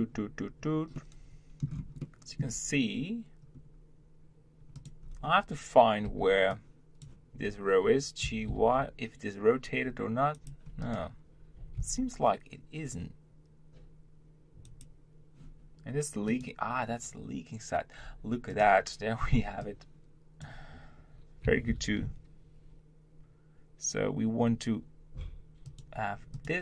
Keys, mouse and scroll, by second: 0.4-0.9 scroll up 1, 0.9 middle click, 1.6-2.0 scroll up 2, 2.0-3.5 shift+middle drag, 3.5-4.7 scroll up 1, 4.7 click, 5.1-6.0 scroll down 2, 6.0 b, 10.8 click, 11.8 b, 16.3 click, 18.0 scroll down 2, 18.6 click, 26.3 click.